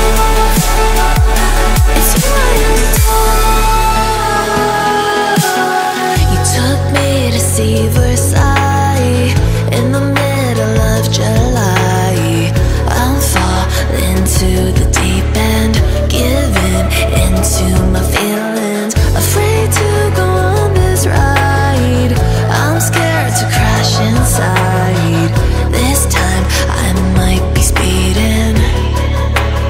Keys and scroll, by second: 4.0 e, 4.3 space, 4.5 Caps_Lock, 6.9 space, 8.5 space, 8.7 Caps_Lock, 9.6 space, 9.7 Caps_Lock, 23.2 Up.